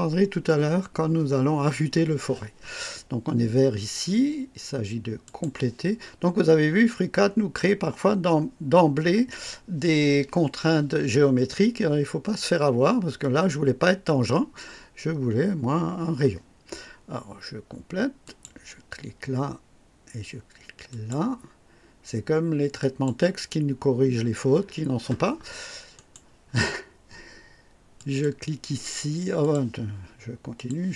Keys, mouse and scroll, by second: 5.2 click, 18.2 click, 20.8 click, 22.7 click, 23.8 scroll up 1, 25.9 right click, 27.9 click, 29.3 click, 30.5 click.